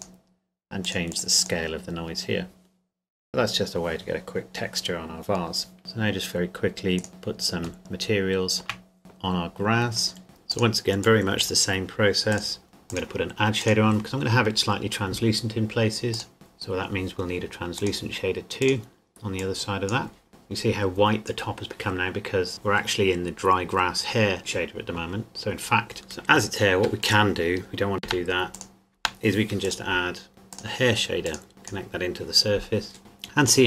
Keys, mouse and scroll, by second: 5.8 shift+click, 7.0 right click, 7.8 shift+middle click, 9.1 click, 16.1 click, 17.7 click, 25.9 shift+middle click, 27.0 click, 27.6 Delete, 27.9 click, 28.2 Delete, 28.6 click, 29.0 Delete, 29.6 click, 30.5 click.